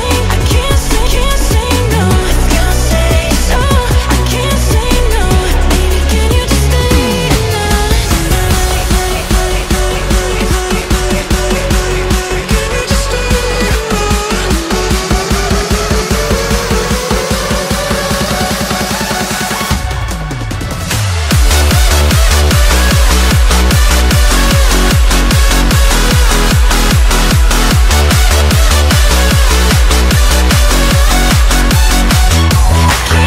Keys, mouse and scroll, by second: 6.9 Tab, 8.0 Tab, 9.0-10.2 middle drag, 10.2 x, 11.5 middle click, 12.4 KP_1, 12.9 Tab, 13.3-13.8 shift+middle drag, 13.8 Tab, 14.3 alt+click, 15.1 alt+click, 15.9 middle click, 18.6 Tab, 19.3 click, 19.8-22.6 drag, 22.6-23.2 right drag, 23.2-24.1 middle drag, 24.1 Tab, 24.4-25.7 middle drag, 25.7 s, 27.3 Tab, 27.7 KP_1, 28.3 shift+middle click, 29.0-29.3 scroll up 2, 29.3 Tab, 29.7 shift+middle click, 30.3 alt+click, 31.2 s.